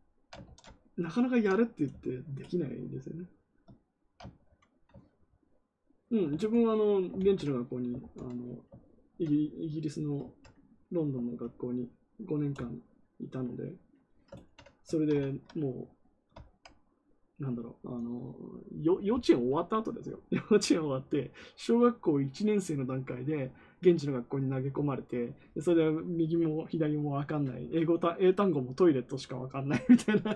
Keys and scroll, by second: 0.4 ctrl+z, 6.3 ctrl+z, 7.1 ctrl+z, 7.9 ctrl+z.